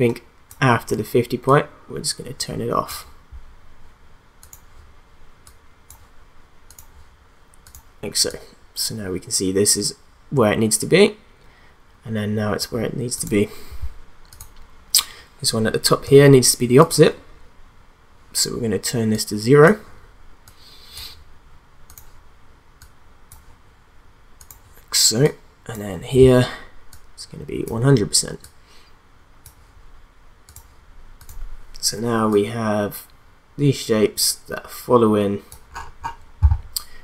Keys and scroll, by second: 16.2 t.